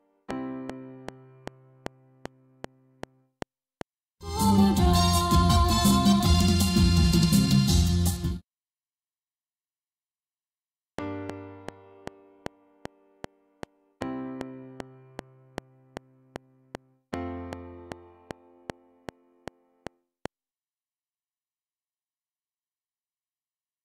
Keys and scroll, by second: 3.8 space, 4.9 Right, 8.1 space, 9.9 Left, 10.8 space, 11.5 F7, 20.4 space, 20.9 Right, 22.1 Tab.